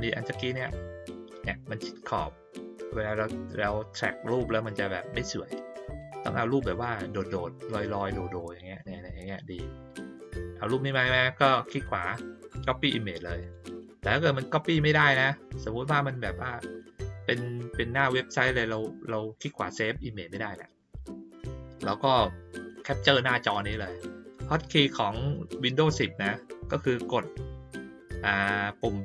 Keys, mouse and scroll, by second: 0.5 click, 5.9 click, 11.7 click, 13.4 click.